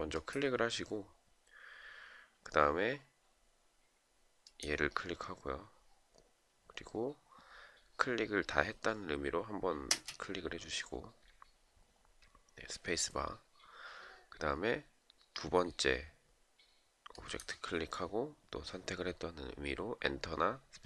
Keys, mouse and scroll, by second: 9.3 space.